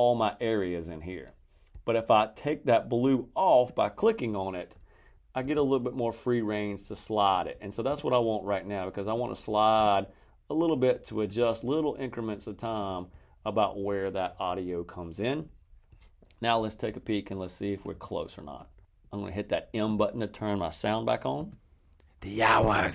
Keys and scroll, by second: 21.3 space.